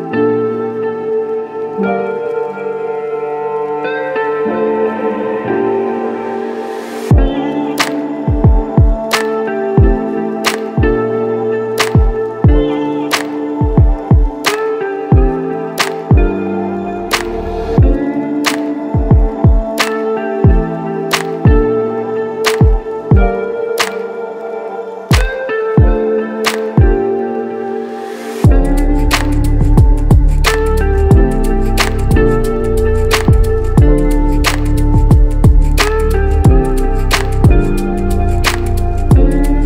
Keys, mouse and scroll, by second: 30.6 Return, 31.8-33.2 alt+middle drag, 33.6 Tab, 37.3 shift+a, 37.4 shift+a, 39.1 s, 39.2 s.